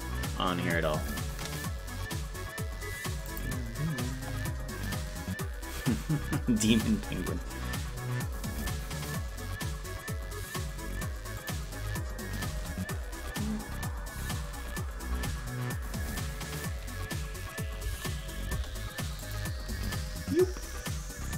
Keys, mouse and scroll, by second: 11.5 click, 12.5 space, 16.4 space, 19.3 click, 19.3 space, 19.7 space.